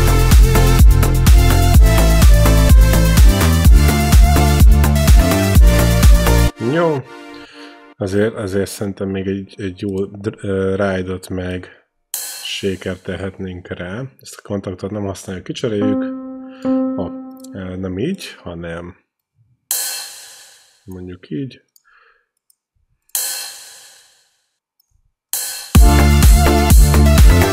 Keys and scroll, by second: 0.9-2.1 typing, 3.1 space, 6.2 space, 15.7 q, 23.1 q, 25.1 q, 25.6 space.